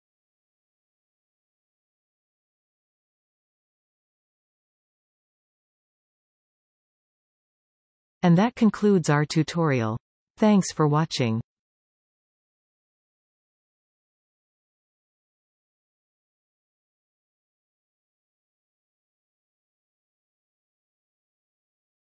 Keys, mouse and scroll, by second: 4.3-8.1 middle drag, 14.6 click.